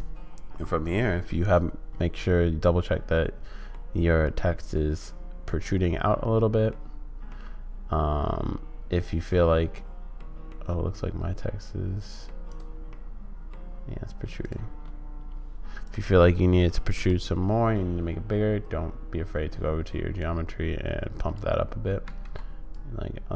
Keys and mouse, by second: 1.3-3.8 middle drag, 4.3-6.7 middle drag, 7.4-10.1 middle drag, 10.4-12.2 middle drag, 12.9 middle click, 15.9 click, 16.4 middle click, 20.3-21.4 drag, 22.0 ctrl+z, 22.8-23.3 drag.